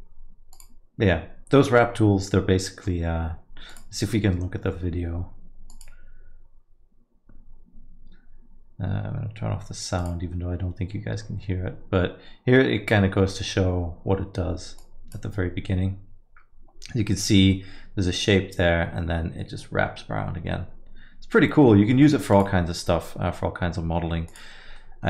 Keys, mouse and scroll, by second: 18.0 middle click, 24.7 middle click.